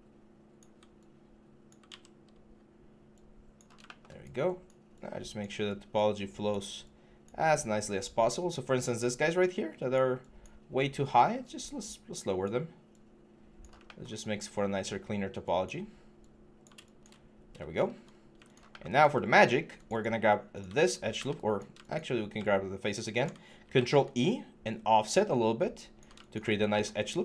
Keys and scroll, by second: 1.7 ctrl+z, 17.9 5, 23.4 ctrl+e.